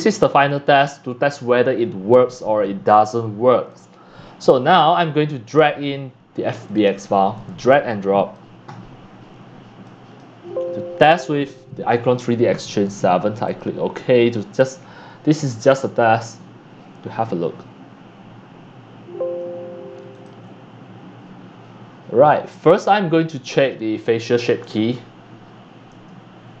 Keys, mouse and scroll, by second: 0.0-6.7 drag, 6.8 click, 7.3 click, 9.8 click, 13.4-18.7 drag, 20.2-21.6 drag, 24.2 click, 24.8 click, 25.0 middle click, 25.1-26.0 scroll down 5, 26.0-26.6 scroll down 1.